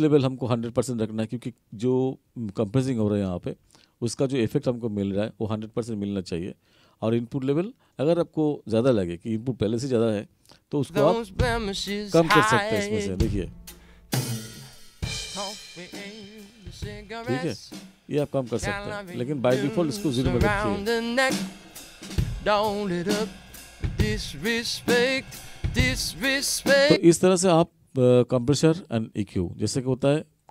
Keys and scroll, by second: 10.8 space, 27.0 space.